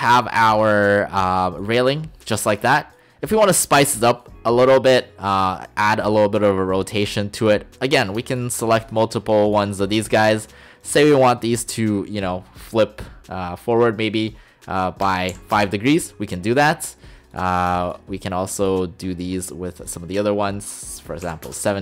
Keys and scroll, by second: 15.3 typing, 15.6 Return, 21.3 typing, 21.5 Return.